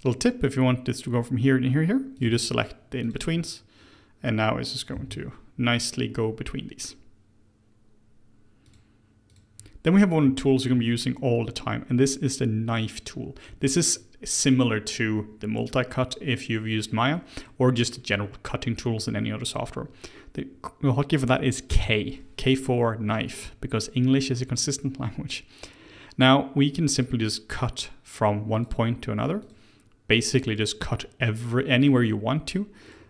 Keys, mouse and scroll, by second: 2.1 click, 3.0 shift+click, 4.9 j, 8.6 click, 9.3 click, 10.4-11.4 shift+middle drag, 11.4 Tab, 12.2 click, 12.9-13.4 scroll up 1, 13.4 Tab, 17.1 middle click, 17.8-18.5 scroll down 1, 19.2-21.7 scroll up 1, 21.7 k.